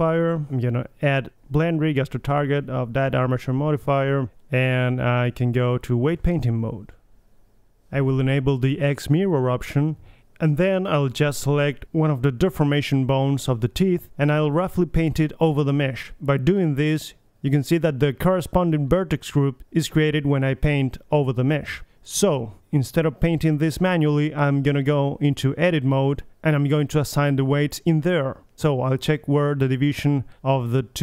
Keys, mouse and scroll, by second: 1.5 middle click, 1.9-2.5 drag, 2.5 middle click, 2.5-3.6 drag, 3.1 right click, 3.9 drag, 4.1-4.7 middle drag, 6.1 middle drag, 6.8 middle click, 7.3 click, 7.5 KP_3, 7.6 r, 7.8 middle click, 8.8 KP_3, 10.3-11.6 middle drag, 12.2 KP_3, 12.8-13.3 middle drag, 13.5 middle click, 13.7 KP_1, 13.9-14.4 ctrl+z, 14.4 KP_3, 14.5-15.0 middle drag, 15.0-15.5 middle drag, 15.8-16.4 middle drag, 16.5-17.0 middle drag, 17.6 middle click, 18.6 middle drag, 18.9 middle click, 20.2-20.6 middle drag, 20.6 right click, 20.8 KP_3, 21.1 alt+r, 21.3-22.0 middle drag, 22.3-23.0 middle drag, 24.2-24.6 middle drag, 24.2 r, 24.8 KP_3, 25.0 r, 25.1 click, 25.3-25.9 drag, 26.4 Tab, 29.2-30.5 drag, 30.0 ctrl+l.